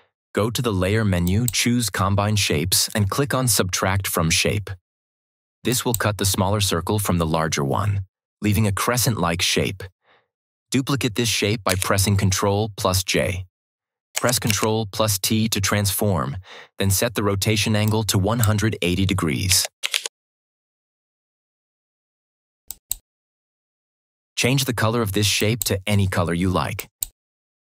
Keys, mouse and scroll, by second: 5.8 click, 11.4 click, 11.6 ctrl+j, 14.3 ctrl+t, 17.7-18.3 drag, 19.1-20.3 typing, 22.5 click, 25.3 click.